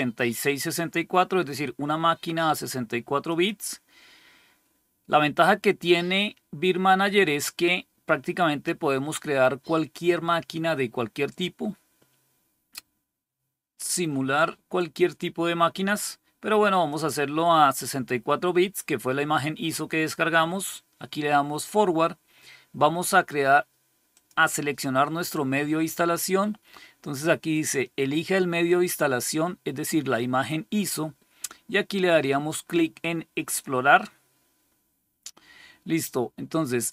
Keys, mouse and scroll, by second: 3.2 click, 16.8 click, 24.0 click, 33.3 click.